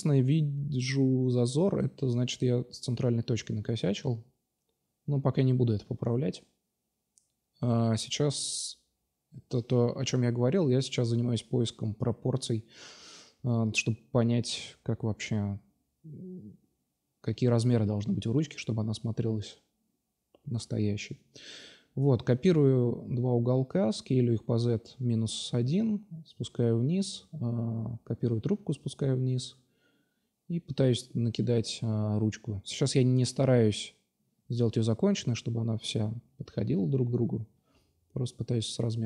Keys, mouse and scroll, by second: 1.4-2.0 right drag, 3.6-5.0 right drag, 5.4 alt+h, 7.5-8.0 middle drag, 8.0-8.8 right drag, 8.3 Tab, 8.8 a, 8.9 a, 9.4 s, 11.1 Tab, 11.6-12.0 drag, 12.3 drag, 14.8 click, 15.2-15.6 middle drag, 15.6 click, 16.4 shift+d, 16.8-17.8 middle drag, 17.0 s, 18.5-19.7 drag, 19.9 right click, 21.3-22.0 middle drag, 24.6 shift+d, 26.2 s, 27.6-28.8 drag, 32.2-34.7 middle drag, 34.7-36.3 drag, 36.3-36.6 middle drag, 36.6-37.4 drag, 37.0 Tab, 37.6 middle click.